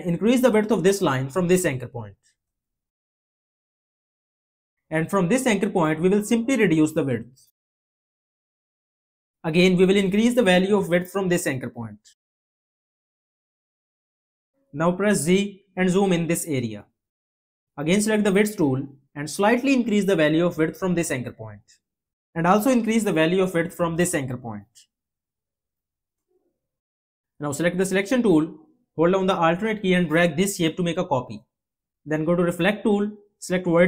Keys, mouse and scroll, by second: 30.0-32.2 alt+drag.